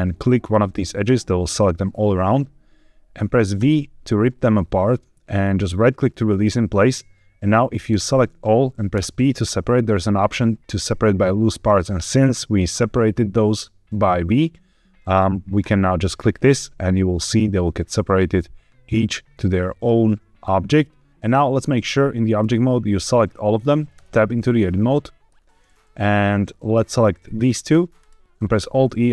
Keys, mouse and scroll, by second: 0.3 ctrl+alt+click, 5.7 right click, 7.8 a, 8.8 p, 20.3 middle click, 21.1 ctrl+z, 21.1 Tab, 21.1 click, 21.7-22.3 drag, 23.8 Tab, 24.3 middle click, 27.2 click, 27.9 shift+click, 28.5 alt+e.